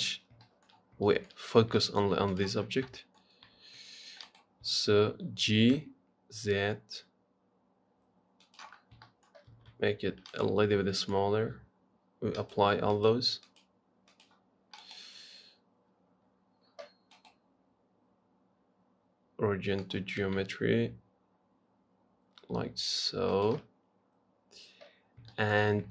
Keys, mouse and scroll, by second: 0.2-0.7 scroll up 5, 0.7 shift+middle click, 1.0-1.3 scroll up 5, 1.3 shift+middle click, 1.7-2.0 scroll up 1, 2.0 shift+middle click, 2.5 click, 2.8-3.1 scroll down 4, 3.2 shift+middle click, 3.7 s, 4.9 g, 9.0 scroll up 1, 9.3 shift+middle click, 9.7 s, 10.9-11.2 scroll down 1, 11.2-12.6 shift+middle drag, 12.6-15.0 drag, 15.0-20.2 right drag, 20.2 click, 20.4 s, 25.3-25.9 scroll up 5, 25.5 shift+middle click.